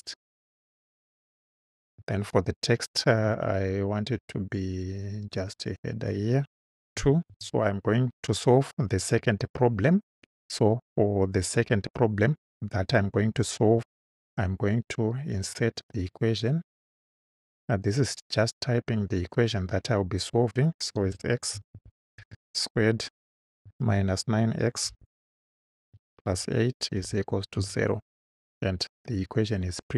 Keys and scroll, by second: 7.0 2, 7.3 ., 7.4 space, 21.0-23.9 typing, 24.9 x, 26.3 8, 27.0 =, 27.6 0.